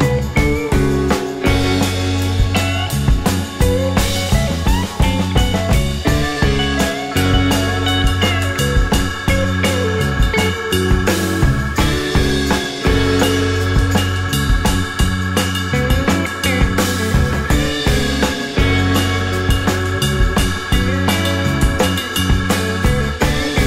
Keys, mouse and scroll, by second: 0.0 double click, 1.0 ctrl+e, 1.4 scroll up 1, 2.0 scroll up 1, 2.1 alt+click, 2.5 alt+middle click, 2.8-3.2 alt+scroll up 1, 6.5 right click, 7.4 scroll down 1, 7.6 alt+click, 8.1 alt+middle click, 8.4 alt+click, 9.0 alt+scroll up 2, 11.2 alt+middle click, 11.7 alt+click, 17.9 ctrl+g, 20.8 double click, 21.9-23.6 typing.